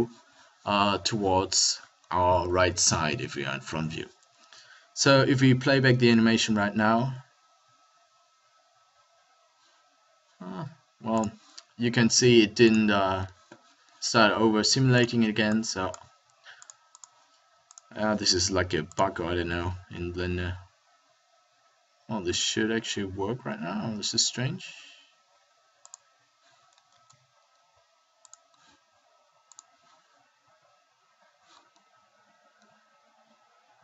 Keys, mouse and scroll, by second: 2.5 KP_3, 3.0 KP_1, 5.7 alt+a, 19.4 alt+a, 26.1 middle click, 26.9 ctrl+a, 29.4 middle click.